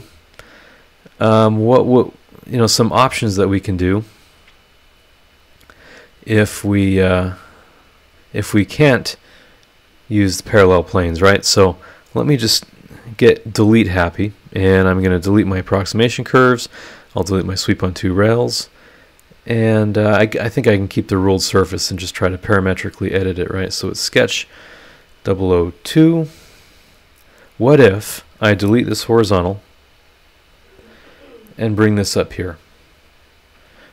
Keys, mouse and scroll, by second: 1.4 click, 4.5 click, 5.6 click, 6.9 click, 7.1 middle click, 8.0 click, 8.4 middle click, 11.3 scroll down 1, 12.0 click, 12.9 Delete, 13.7 click, 14.1 click, 14.4 Delete, 14.6 click, 16.0 click, 16.3 Delete, 16.8 click, 17.3 Delete, 18.1 click, 20.5 click, 21.2 scroll down 2, 22.0 click, 23.4 click, 23.7 middle click, 24.1 click, 25.2 click, 26.1-26.7 scroll down 1, 26.7-27.1 scroll up 1, 28.2 click, 28.9 Delete, 30.5-32.1 drag, 33.1 click, 33.4 middle click.